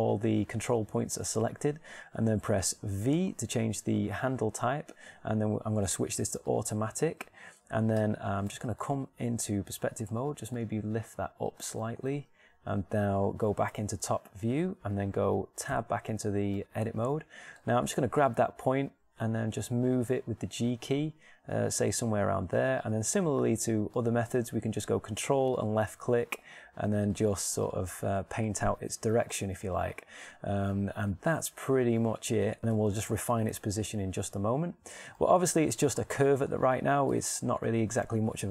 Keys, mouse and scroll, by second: 0.2 a, 3.6 v, 4.3 v, 8.6 Tab, 11.6 g, 12.6-14.0 middle drag, 14.6 KP_7, 16.3 Tab, 18.6 shift+right click, 18.9 g, 31.1-32.6 middle drag, 33.6-35.0 middle drag, 38.0 middle click.